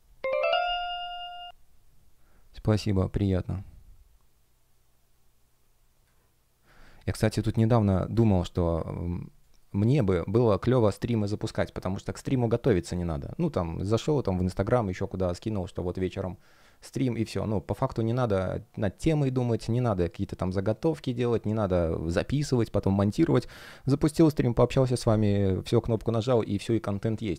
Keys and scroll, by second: 5.2 space, 7.3 super+\, 7.7 space, 9.3 space.